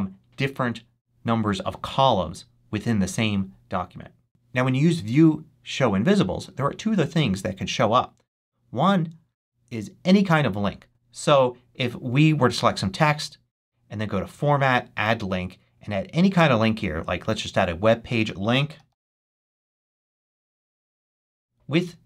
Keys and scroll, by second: 18.4-20.2 typing.